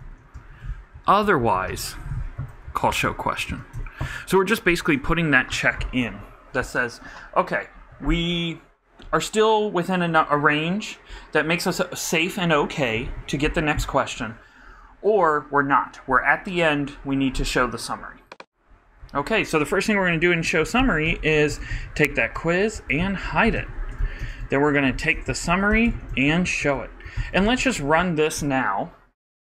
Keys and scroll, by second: 0.0-2.3 typing, 2.8 super+Down, 2.9 super+Left, 3.0 super+Tab, 3.4 super+Right, 3.7 super+Return, 4.2 shift+BackSpace, 4.8 shift+], 20.4-21.5 typing, 22.0 super+z, 22.2 super+Right, 22.7 super+., 23.3-25.4 typing, 26.2 super+y, 26.4 super+Right, 27.0 super+., 27.3-28.5 typing.